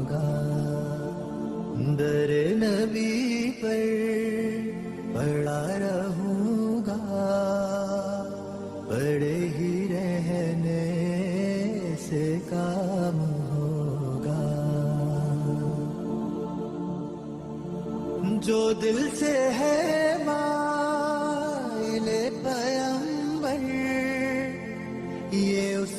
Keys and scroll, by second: 7.4 F2, 10.9 b, 12.9 Escape, 18.4 r, 20.1 Escape, 22.2 shift+Page_Down, 23.8 alt+w, 24.0 p.